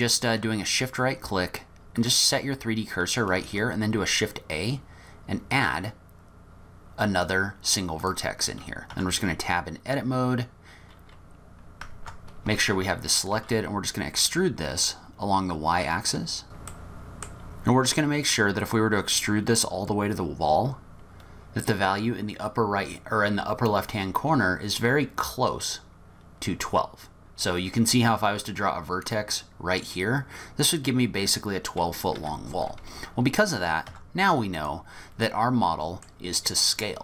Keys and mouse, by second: 2.1 shift+click, 3.5 shift+a, 8.9 Tab, 11.9 Tab, 12.5 1, 13.4 e, 17.1 ctrl+z, 17.2 e, 33.9 Tab, 35.3 drag, 35.4-36.1 middle drag.